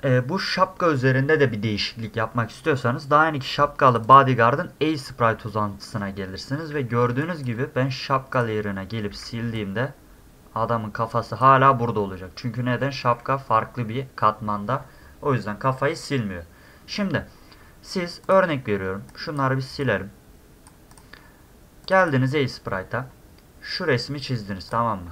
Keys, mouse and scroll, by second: 3.9 click, 4.0 click, 5.3-6.1 scroll up 4, 6.7 scroll up 2, 7.1 space, 7.2 click, 8.3 click, 8.7 middle click, 9.1 d, 9.5-11.4 drag, 13.0 e, 16.9 middle click, 18.2 click, 19.1 click, 19.8 click, 20.9 click, 21.8 click, 22.0 click.